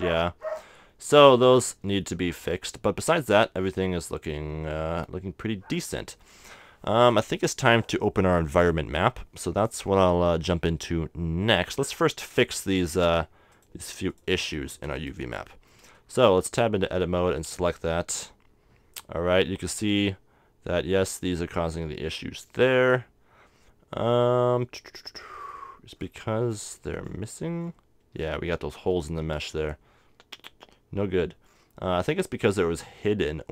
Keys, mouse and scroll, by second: 0.6-4.9 middle drag, 9.4 middle click, 11.6 middle click, 11.9-13.5 middle drag, 13.5-15.4 drag, 13.5 right click, 15.0 right click, 16.3 Tab, 17.1 a, 25.6-33.5 middle drag.